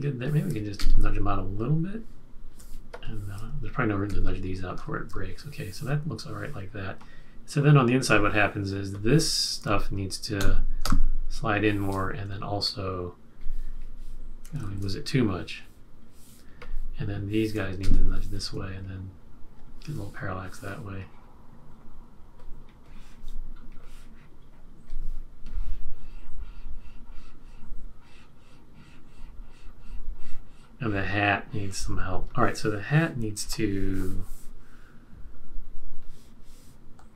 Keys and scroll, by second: 0.7 shift+Left, 4.0 shift+Right, 4.7 shift+Left, 10.3 shift+Right, 10.8 shift+Right, 14.6 super+z, 17.8 shift+Left.